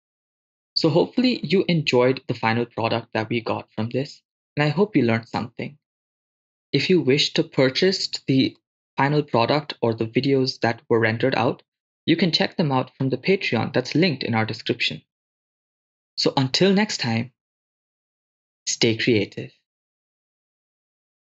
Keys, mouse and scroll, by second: 2.8-10.8 drag, 8.9 BackSpace, 12.8 shift+space.